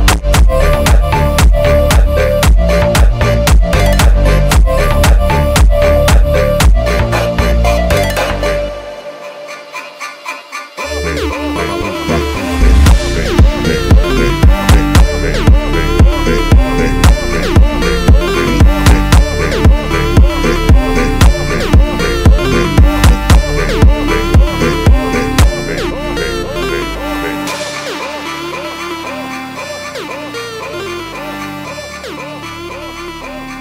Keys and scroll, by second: 5.1 Return, 11.2 BackSpace, 15.5 n, 15.8 f, 16.5 BackSpace, 17.3 Caps_Lock, 17.8 i, 18.0 n, 18.2 f, 19.0 o, 21.1 shift+`, 22.8 y, 23.5 r, 23.8 m, 24.1 i, 25.1 o, 25.9 BackSpace, 26.1 c, 26.5 m, 26.9 Return, 27.7 w, 29.2 y, 29.8 r, 30.4 w, 30.6 e, 31.7 c, 31.9 o, 32.1 m.